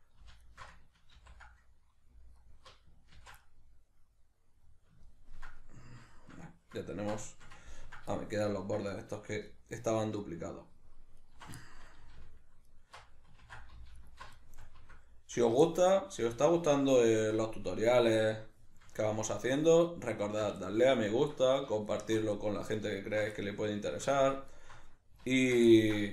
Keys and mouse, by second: 0.5 alt+shift+right click, 1.1 ctrl+x, 2.4 alt+right click, 3.1 ctrl+x, 3.4-9.5 middle drag, 9.5 alt+right click, 10.2 alt+shift+right click, 11.2 alt+shift+right click, 11.6-12.7 shift+middle drag, 12.7 alt+shift+right click, 13.4 ctrl+z, 14.0 alt+shift+right click, 14.4-16.5 shift+middle drag, 16.5 alt+shift+right click, 17.0-19.4 shift+middle drag, 19.4 alt+shift+right click, 20.2 alt+shift+right click, 20.6-21.8 shift+middle drag, 21.8 alt+shift+right click, 22.4 middle click, 23.0 alt+shift+right click, 23.4-24.5 shift+middle drag, 24.5 alt+shift+right click, 25.3 alt+shift+right click, 25.7-26.1 ctrl+middle drag.